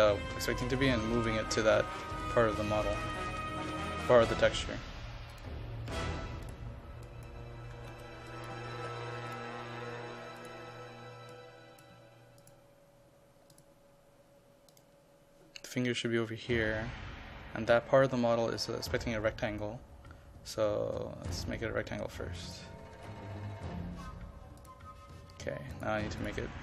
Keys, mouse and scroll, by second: 0.9 KP_2, 1.0 KP_5, 1.7 click, 2.3 KP_5, 3.1 click, 7.5-8.9 typing, 8.3 click, 9.4 click, 12.0 KP_5, 12.5 click, 22.7 KP_0, 23.0 KP_Decimal, 23.2 KP_5, 24.7 click.